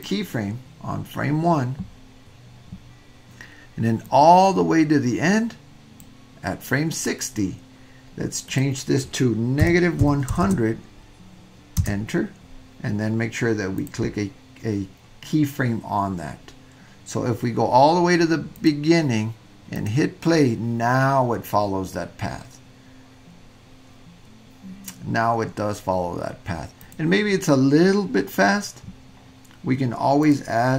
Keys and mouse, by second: 0.0 click, 4.1-6.0 drag, 8.5-13.1 drag, 10.4 KP_0, 13.8 click, 18.5 click, 19.7 click, 26.8 click, 30.2-30.7 drag.